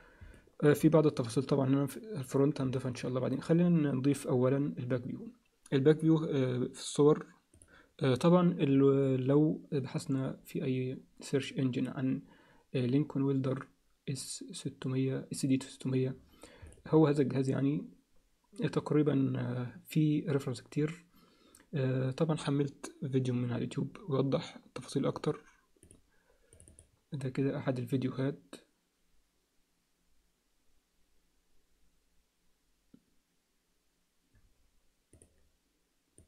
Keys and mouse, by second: 0.3 alt+middle click, 2.8 alt+shift+middle click, 3.3 click.